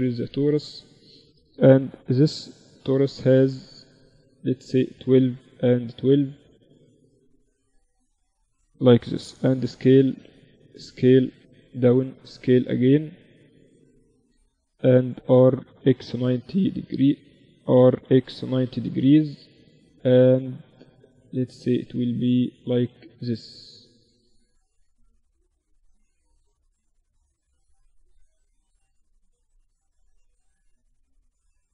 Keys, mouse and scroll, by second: 1.7 F6, 8.7 s, 10.1 s, 11.5 s, 13.5-15.9 middle drag, 15.1 r, 17.1 r, 19.0 s, 22.3 Tab, 23.3 a, 25.5 Tab, 26.0 z, 26.7 z, 28.3 z, 30.4-31.7 drag.